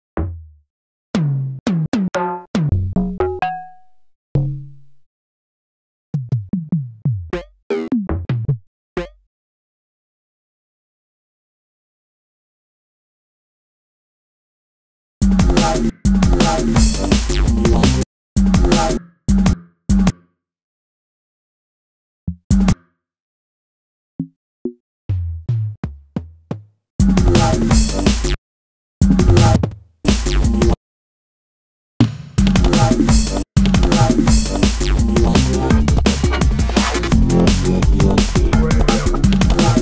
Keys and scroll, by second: 0.0 Up, 4.7 Down, 13.6 space, 16.7 space, 20.9 space, 22.0 super+space, 22.1 super+d, 22.6 super+Down, 22.9 super+d, 23.0 super+Down, 23.3 super+d, 23.5 super+Down, 23.7 super+d, 24.1 super+d, 24.2 super+Down, 24.4 super+d, 24.5 super+Down, 24.7 super+d, 24.9 super+Down, 25.4 super+space, 29.1 space, 29.7 super+space, 31.7 space.